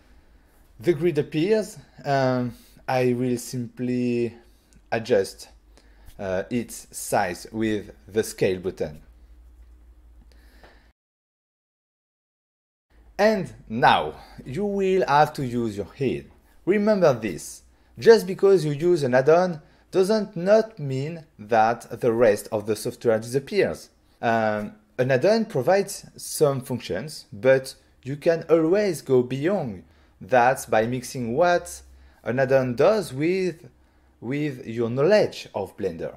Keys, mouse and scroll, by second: 1.2 click, 3.1 click, 5.0 click, 11.0 click, 12.5 click.